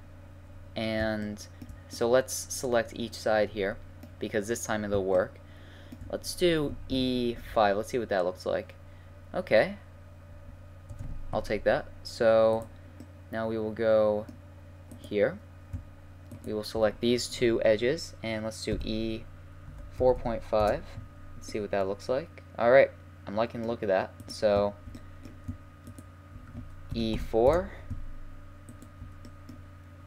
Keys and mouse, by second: 0.5 middle click, 2.0 middle click, 3.1-4.8 middle drag, 6.9 e, 8.4-12.5 middle drag, 12.5-13.3 right drag, 13.3-14.9 middle drag, 14.9-17.9 right drag, 17.9 middle click, 18.7 e, 23.4-24.2 middle drag, 24.2-27.5 right drag, 26.9 e.